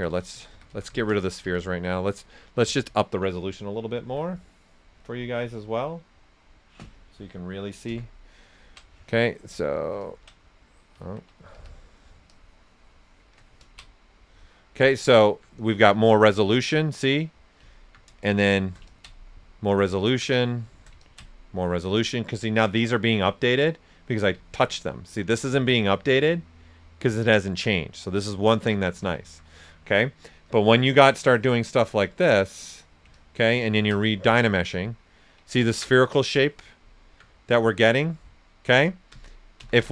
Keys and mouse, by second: 2.6 click, 3.7-4.9 typing, 7.8 Return, 10.0 ctrl+click, 11.0 ctrl+z, 11.5 typing, 11.6 click, 12.3-13.6 shift+drag, 14.2 right click, 16.1 alt+right click, 16.6 ctrl+right click, 18.2 shift+click, 19.9 alt+right click, 20.3 shift+click, 24.3 ctrl+shift+click, 24.3 typing, 24.4 alt+right click, 26.2-27.0 typing, 28.3 alt+right click, 28.8 ctrl+right click, 30.4 click, 35.0 ctrl+right click, 36.9 alt+right click, 38.7 ctrl+z.